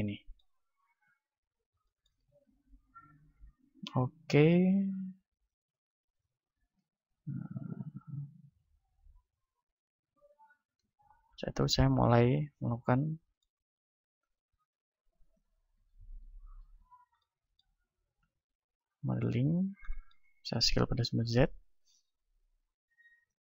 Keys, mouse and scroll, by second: 1.0 KP_1, 1.8-6.2 middle drag, 2.2 z, 2.7 a, 5.2 b, 6.9 Tab, 7.5-10.1 drag, 10.8 Tab, 12.4 a, 12.7-14.7 middle drag, 14.4 z, 14.7 ctrl+Tab, 15.7-18.6 right drag, 16.9-18.6 drag, 18.2 KP_1, 18.6-21.2 middle drag, 20.7 s, 21.2-23.4 drag.